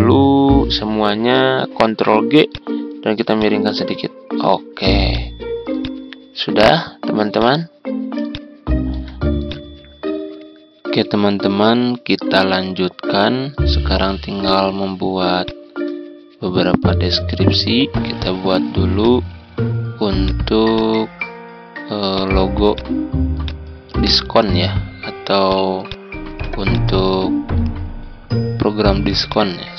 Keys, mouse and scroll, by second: 1.8 ctrl+g, 2.4-6.8 drag, 8.2 ctrl+click, 9.4 click, 10.4 click, 18.9-29.7 drag, 26.3 z.